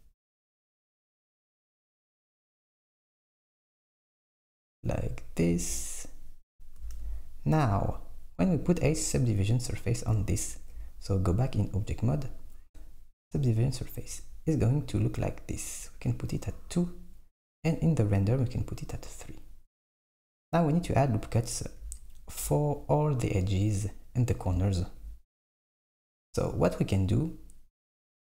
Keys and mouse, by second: 5.5 Tab, 6.9 Tab, 9.7 click, 10.1 Tab, 13.9-15.4 drag, 16.1-22.0 drag.